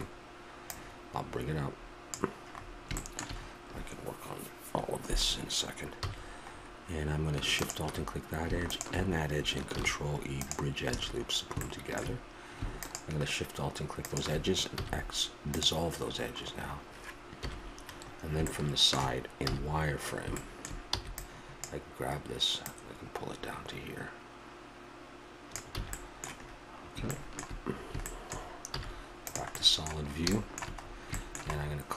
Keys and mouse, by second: 0.6-2.5 drag, 2.5-7.5 middle drag, 6.0 a, 7.5-10.8 drag, 9.8 ctrl+e, 10.9 a, 12.8-14.8 drag, 14.8 x, 16.2-18.5 middle drag, 17.4 KP_1, 19.5 z, 20.9 b, 25.7 a, 25.9-30.3 middle drag.